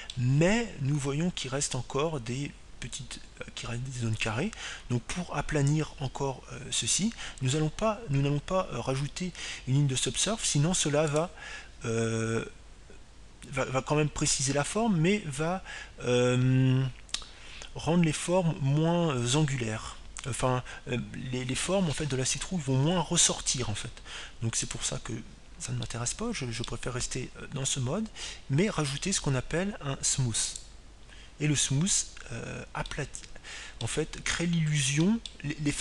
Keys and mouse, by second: 13.0-15.1 drag, 26.5-28.3 drag, 27.9-29.6 middle drag, 32.3-34.5 drag, 34.9-35.8 middle drag.